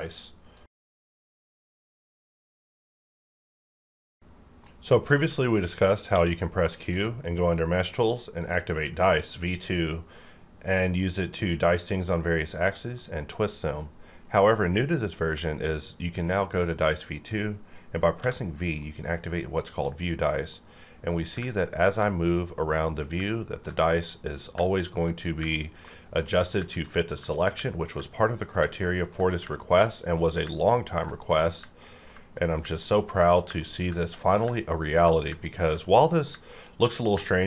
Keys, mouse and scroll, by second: 6.0 q, 8.4 click, 9.3 scroll up 1, 10.8-11.5 scroll up 1, 12.6 right click, 14.2 q, 16.6 click, 18.2 v, 18.8-21.5 middle drag, 23.3 ctrl+middle click, 24.7 ctrl+middle click, 25.5 ctrl+middle click, 26.8 ctrl+middle click, 27.7 ctrl+middle click, 28.8 ctrl+middle click, 29.5 ctrl+middle click, 30.7 ctrl+middle click, 31.8 ctrl+middle click, 32.8 ctrl+middle click, 33.6 ctrl+middle click, 34.7 ctrl+middle click, 35.4 ctrl+middle click, 36.5 ctrl+middle click, 37.3 ctrl+middle click.